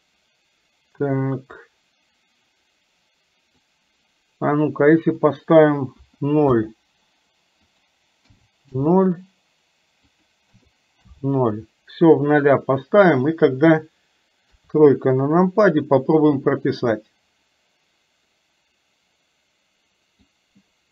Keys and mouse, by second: 1.8-3.7 drag, 5.3-6.7 drag, 7.7-8.9 drag, 10.2-11.2 drag, 14.5 KP_3, 17.2-20.4 drag.